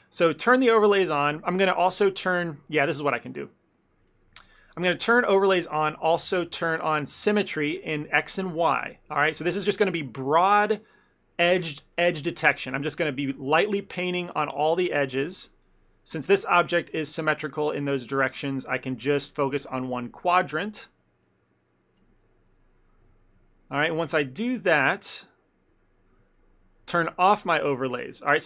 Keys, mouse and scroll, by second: 0.5 ctrl+middle click, 0.8 middle click, 1.1 ctrl+middle click, 3.0 ctrl+middle click, 3.4 ctrl+z, 4.3 ctrl+z, 4.9 ctrl+z, 6.2 middle click, 7.3 click, 8.2 click, 8.8 ctrl+middle click, 9.2 f, 10.4 click, 10.8 click, 11.8 click, 13.4 click, 14.0 click, 14.0 middle click, 14.3 ctrl+middle click, 14.6 middle click, 15.2 click, 15.4 click, 15.9 middle click, 16.3 ctrl+middle click, 17.3 click, 18.2 middle click, 18.9-20.9 click, 21.0 click, 21.3 middle click, 22.1 click, 22.3 click, 22.9 middle click, 23.2 shift+middle click, 23.4 middle click, 23.9 click, 24.1 click, 24.3 click, 24.9 click, 24.9 middle click, 25.3 middle click, 25.4 shift+middle click, 25.9 click, 26.0 middle click, 26.2 middle click, 27.4 click, 27.9 middle click.